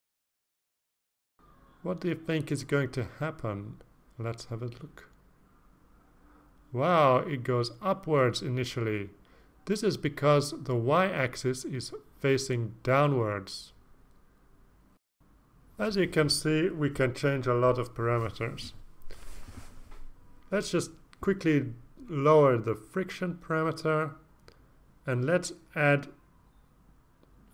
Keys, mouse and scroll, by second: 1.5 click, 4.8 click, 9.7 click, 11.1 click, 13.3 click, 13.8 click, 15.0 0, 15.3 Return, 16.0 click, 20.2-20.7 scroll up 3, 21.0-21.5 scroll up 4, 21.9 click, 24.6-25.8 typing, 26.3 Return, 27.0-27.5 scroll down 2.